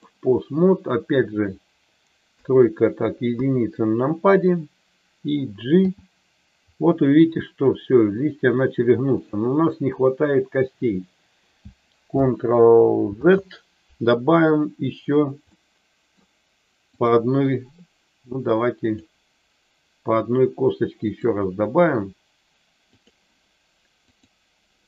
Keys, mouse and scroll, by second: 2.3 KP_3, 3.3 KP_1, 5.8 g, 13.0 ctrl+z, 15.6 middle click, 16.9 click, 18.8 click, 21.0 click, 22.9 click.